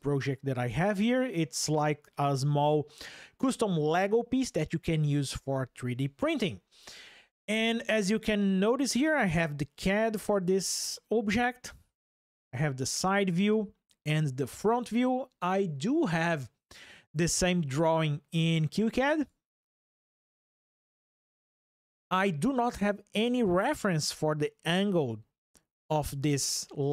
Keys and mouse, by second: 11.0 click.